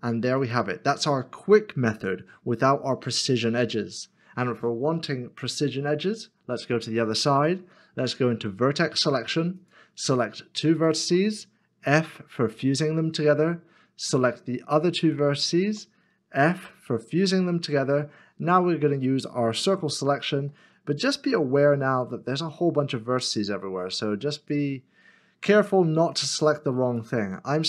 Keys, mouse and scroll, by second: 1.2 x, 1.3 middle click, 5.0 middle click, 8.4 1, 10.4 1, 10.8 shift+click, 12.5 f, 15.4 shift+click, 16.6 f, 17.7 middle click, 21.2 c, 24.8-25.2 scroll up 1, 25.2-27.1 scroll down 1.